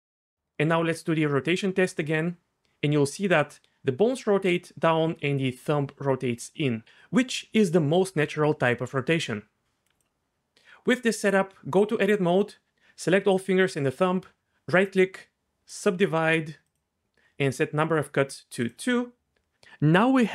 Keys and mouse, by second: 1.7 click, 11.0 Tab, 14.8 click, 16.7 click, 18.7-20.2 drag.